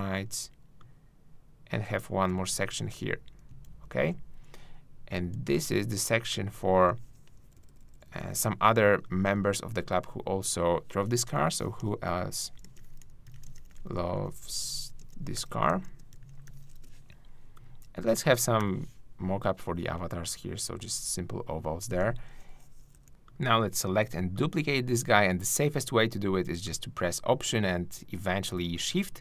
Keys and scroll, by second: 2.7 alt+shift+super+z, 3.4 super+z, 7.4 shift+super+Up, 9.3 super+Up, 16.5-17.3 typing, 19.3 shift+o, 22.9 shift+Down.